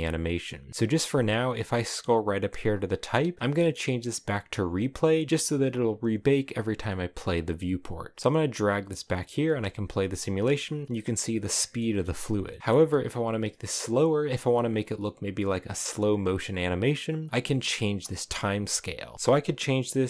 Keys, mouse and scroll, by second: 4.5-9.4 drag, 9.4 space, 10.5-15.7 middle drag, 15.7 space.